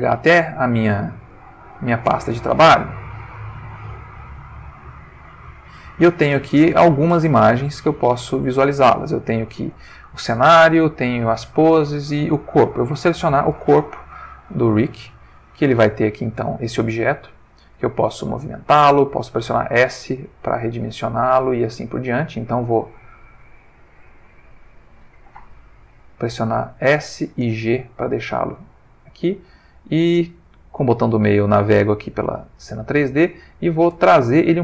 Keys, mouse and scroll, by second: 1.3 click, 2.7 click, 3.7 click, 4.4 click, 5.3 click, 7.9 click, 13.1 click, 14.7 click, 15.9 ctrl+middle click, 17.2-18.7 drag, 19.0 s, 22.0 click, 22.5-23.7 ctrl+middle drag, 24.3 g, 25.4 click, 26.0 s, 27.0 click, 27.2 g, 28.0 click, 28.6 ctrl+middle click, 29.1 ctrl+middle click, 29.4-33.8 ctrl+middle drag.